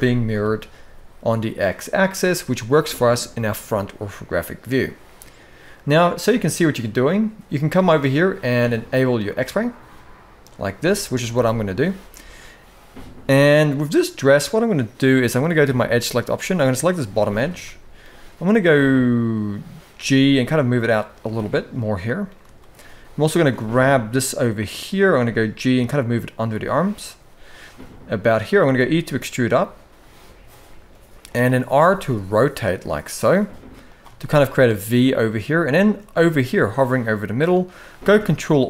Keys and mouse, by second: 0.0 KP_1, 2.2 shift+middle click, 10.6 shift+middle click, 13.9 click, 15.5 click, 16.4 click, 16.9 shift+middle click, 19.6 g, 22.3 shift+middle click, 23.1 click, 24.8 g, 28.3 e, 31.5 r, 33.9 shift+middle click, 37.7 ctrl+r.